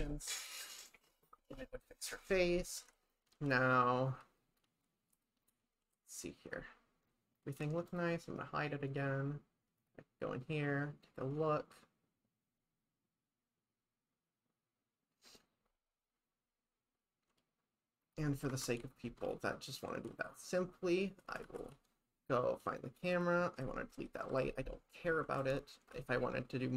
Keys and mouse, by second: 2.8 shift+`, 8.9 click, 18.6 shift+`, 21.6 shift+`, 23.1 click, 24.3 Delete, 25.4 shift+`.